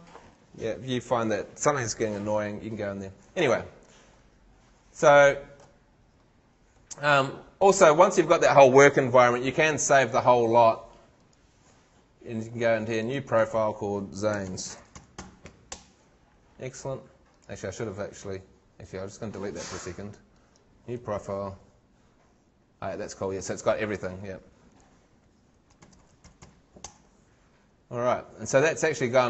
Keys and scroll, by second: 14.2-15.7 typing, 15.8 shift+Return, 25.6-26.9 typing.